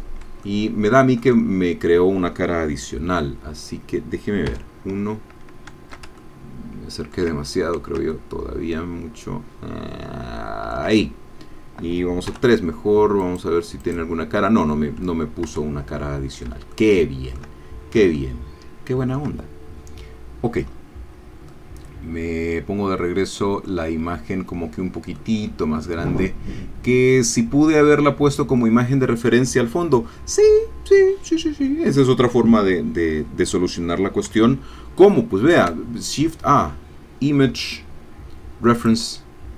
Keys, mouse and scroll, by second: 0.4-2.0 shift+middle drag, 4.5 1, 5.2-5.7 scroll up 2, 6.2-7.3 ctrl+shift+drag, 8.1-10.9 ctrl+drag, 12.3 3, 13.4-14.8 drag, 14.8-15.5 scroll down 1, 15.5 Tab, 16.7 shift+click, 17.6-18.0 shift+scroll down 1, 18.0-19.3 shift+middle drag, 20.1-21.0 scroll down 4, 21.5-23.8 middle drag, 24.0-25.2 scroll up 2, 25.2 middle click, 25.2-28.7 drag, 35.5 shift+a, 38.8 click.